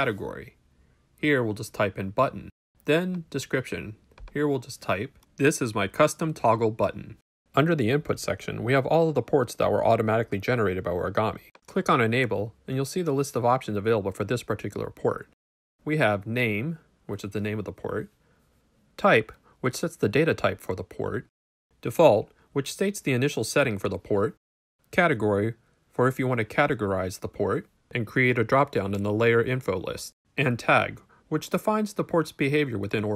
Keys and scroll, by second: 0.1-1.6 typing, 4.9-7.5 typing.